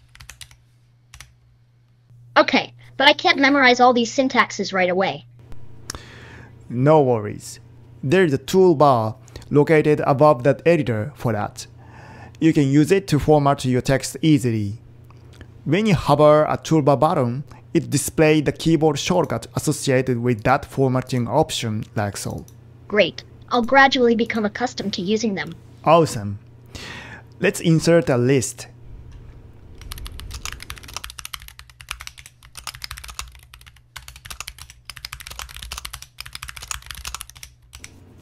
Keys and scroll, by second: 0.2 super+Right, 0.4 Return, 1.2 Return, 29.7-38.2 typing.